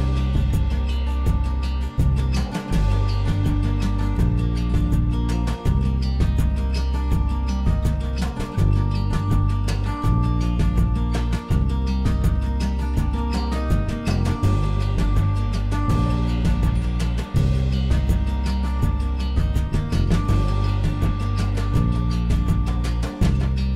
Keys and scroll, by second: 0.5 p, 1.9 l, 1.9 Escape, 2.5 m, 8.0 p, 9.7 Escape, 10.4 m, 13.1-18.5 typing, 15.3 Delete, 18.6 Return, 19.5 Delete, 21.0-23.4 typing.